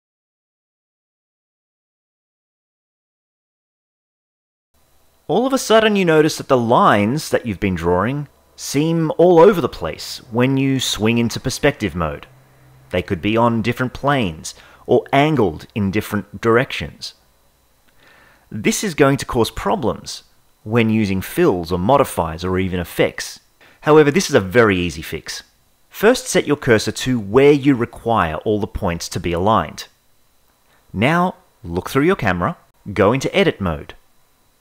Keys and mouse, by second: 5.7-11.6 shift+middle drag, 14.3-17.5 shift+middle drag, 18.3-20.6 drag, 20.9 Tab, 21.5 ctrl+Tab, 22.5 l, 25.9 shift+s, 29.1-31.8 shift+middle drag, 32.1 KP_0, 32.7 ctrl+Tab.